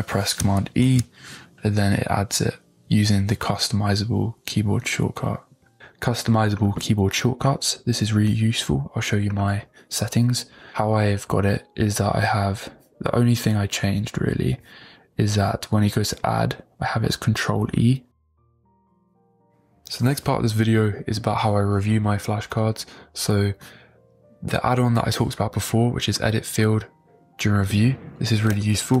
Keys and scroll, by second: 0.8 super+e.